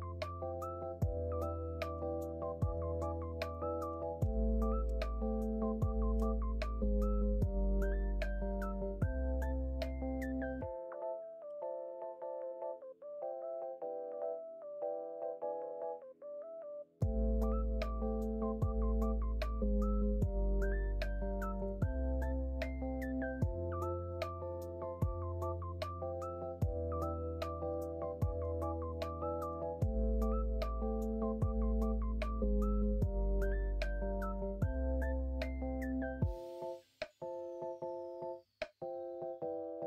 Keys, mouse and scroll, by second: 2.0 ctrl+z, 4.2 ctrl+b, 28.8 shift+middle click, 33.9 shift+middle click, 36.7 3.